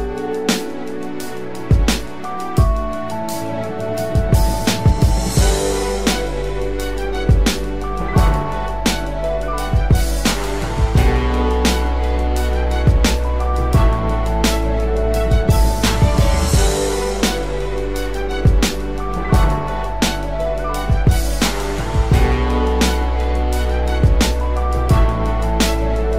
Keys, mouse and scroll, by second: 13.7 double click, 16.2 alt+click.